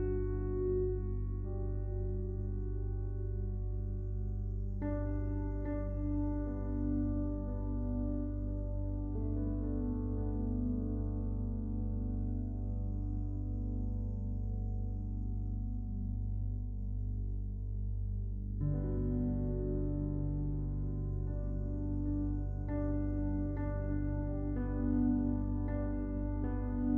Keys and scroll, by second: 24.2 ctrl+z.